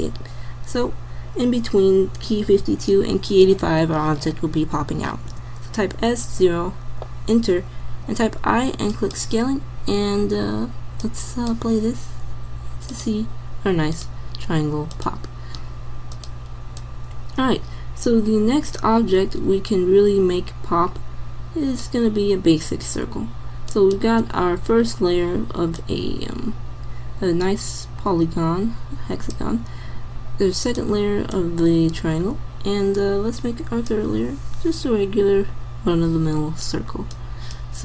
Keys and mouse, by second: 8.1 i, 11.1 click, 23.7-25.4 drag, 25.9 click, 30.7-32.5 drag.